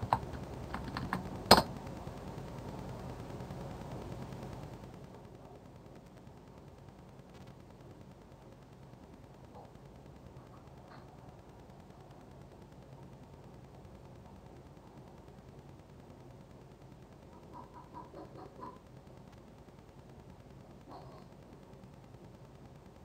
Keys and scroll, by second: 0.1 b, 0.3 Down, 1.4 Down, 1.5 Return.